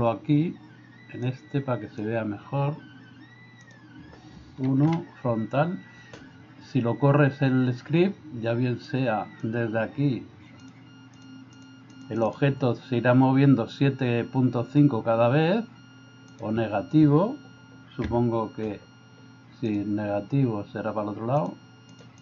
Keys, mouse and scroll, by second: 1.4 click, 4.9 KP_1, 8.8 click, 11.6 click, 12.0 click, 18.0 -, 19.7 click, 21.5 click.